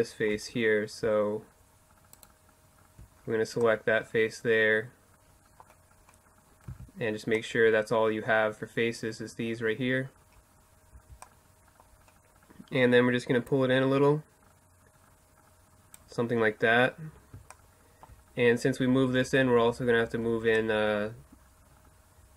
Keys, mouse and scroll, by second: 5.1-6.3 middle drag, 5.7 z, 9.9 z, 12.5-14.2 drag, 15.8-22.3 middle drag.